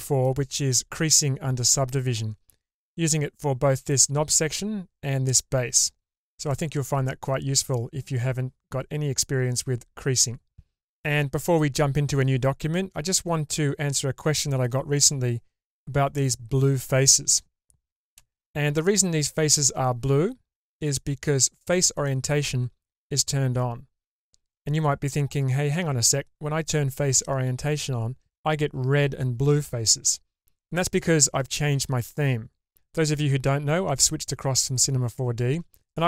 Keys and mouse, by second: 6.4-13.3 middle drag, 18.2 shift+space, 19.7-20.2 shift+middle drag.